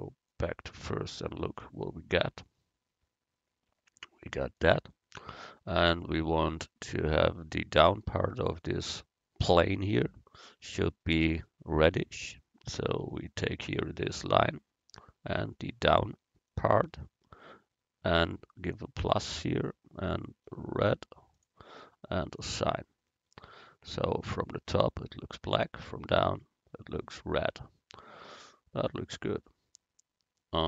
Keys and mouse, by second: 0.3-2.5 drag, 8.6-10.7 right drag, 10.7 Tab, 13.6-15.6 right drag, 15.6-21.6 drag, 22.5-23.7 drag, 23.7 Tab.